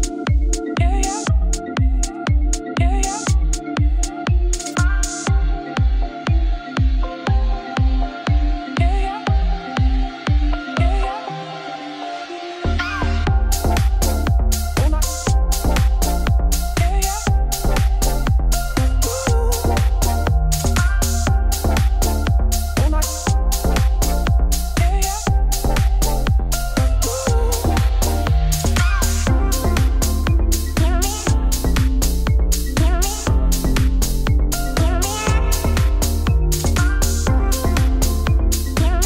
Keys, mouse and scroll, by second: 2.8 click, 3.1 shift+click, 7.9 s, 12.0 middle click, 12.5-13.0 scroll up 1, 13.0-26.5 alt+drag, 26.7 ctrl+b, 28.4-29.6 middle drag, 30.4 2, 30.4-33.9 alt+drag, 33.9 middle click, 34.3 ctrl+r, 34.8 middle click, 35.2 g, 35.9 alt+shift+click.